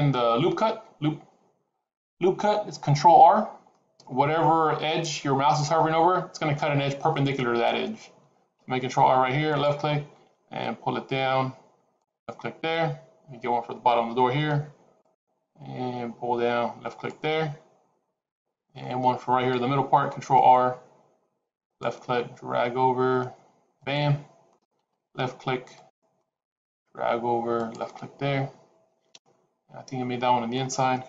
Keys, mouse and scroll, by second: 3.3-4.2 scroll down 2, 3.5 middle click, 8.5 ctrl+r, 14.2 ctrl+r, 19.8 ctrl+r, 24.7 ctrl+r.